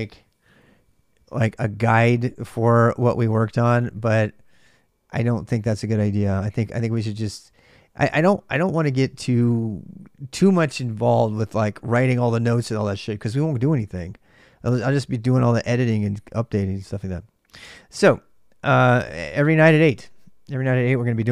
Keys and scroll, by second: 3.2 ctrl+[, 3.2-3.5 typing, 3.3 ctrl+j, 4.3 ctrl+[, 4.6 ctrl+j, 5.5 ctrl+[, 5.6 j, 5.8 j, 6.9 ctrl+[, 6.9 ctrl+j, 7.2 shift+z, 7.4 shift+z, 17.4 y, 17.7 Return.